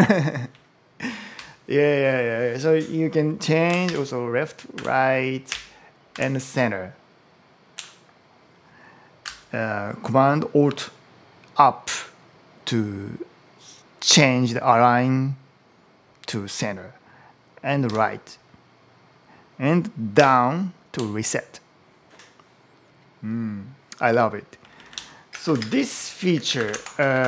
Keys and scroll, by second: 0.1 Down, 1.2 Up, 3.7 alt+super+Left, 4.6 alt+super+Right, 5.3 alt+super+Down, 5.9 alt+super+Up, 17.7 alt+super+Right, 20.0 alt+super+Down, 24.5 Down, 25.3 ctrl+shift+super+m, 25.7 super+t, 25.9-27.2 typing.